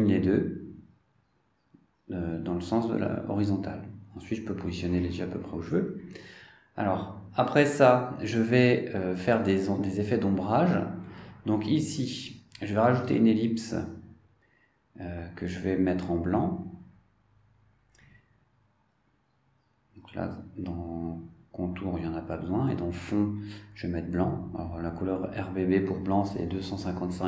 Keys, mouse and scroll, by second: 0.0 click, 2.6 click, 5.1-7.3 drag, 7.5 click, 8.7 scroll down 2, 9.3 scroll down 2, 11.8 click, 15.0-18.3 drag, 20.4 click, 22.9 click, 23.7 click, 24.4 click, 26.8 click.